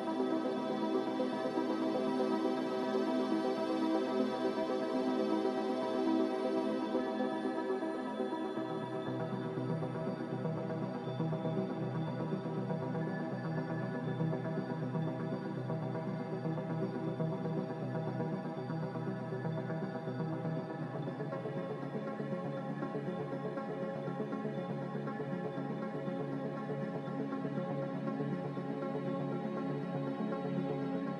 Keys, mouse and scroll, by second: 17.7 n, 20.6 a, 23.9 b, 26.3 Delete, 27.6 Delete, 31.0 click.